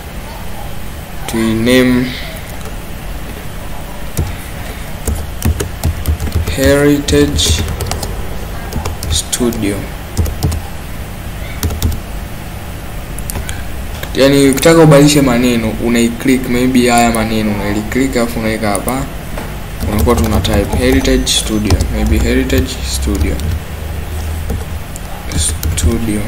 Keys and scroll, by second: 5.2-12.4 typing, 5.6 Caps_Lock, 19.9-25.9 typing.